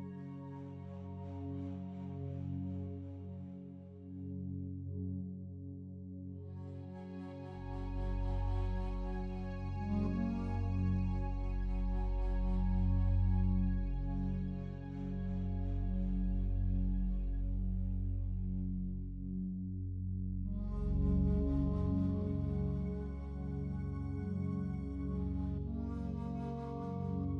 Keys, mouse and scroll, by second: 0.7 a, 0.9 a, 1.7 right click, 2.8 Tab, 3.1-7.4 alt+drag, 7.4 right click, 8.6 3, 8.8 right click, 10.2 shift+right click, 11.4 alt+click, 12.5 shift+right click, 12.9 alt+click, 13.9 shift+right click, 15.8 right click, 22.9 right click, 27.0 right click.